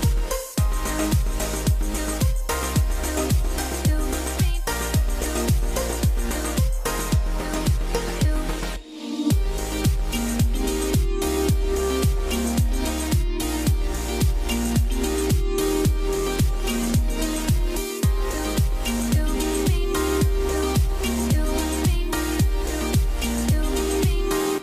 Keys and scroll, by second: 2.1 F12, 24.5 F12.